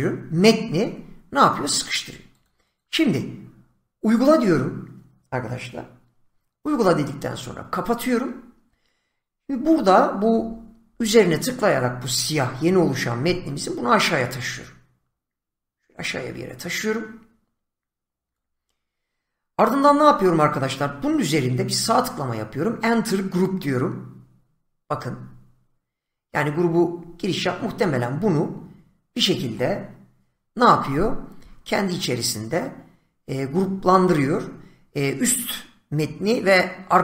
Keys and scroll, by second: 2.7 <.